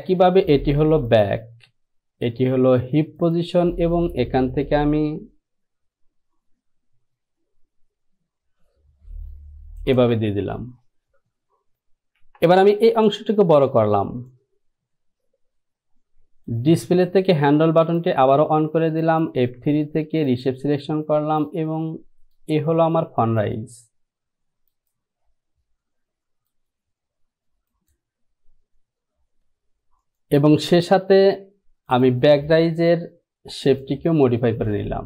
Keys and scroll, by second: 12.4 Return.